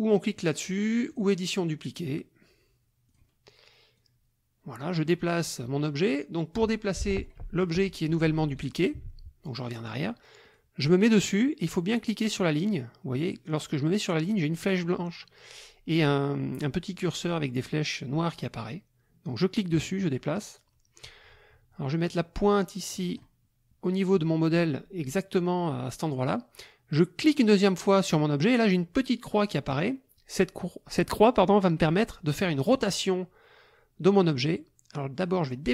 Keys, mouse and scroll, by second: 1.1 click, 3.1 click, 3.9-7.4 drag, 7.4 Delete, 8.4 ctrl+z, 10.5 click, 19.6-23.3 drag, 27.2 click.